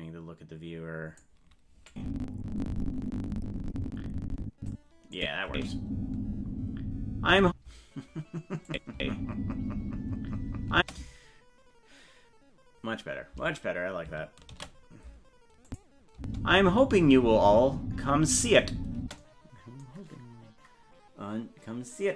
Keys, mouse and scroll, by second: 1.9-4.7 drag, 5.2 click, 5.5 space, 8.7 click, 8.9 space, 14.9 ctrl+s, 15.7 click, 16.2 space.